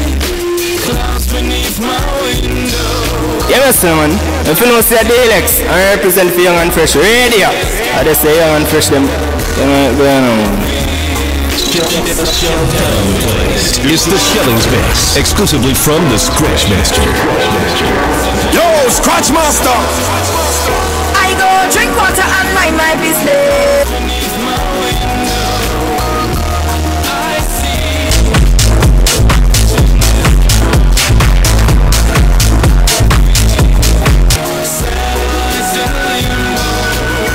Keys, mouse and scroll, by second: 24.5 Page_Down, 34.3 Page_Down.